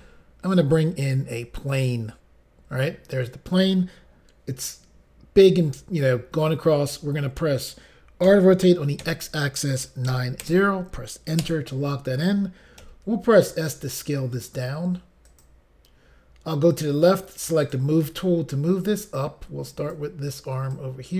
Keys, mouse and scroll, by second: 1.7 click, 9.0 x, 10.0-10.4 typing, 11.4 Return, 12.8 s, 15.2 click, 17.6 click, 18.8 click, 20.7 click.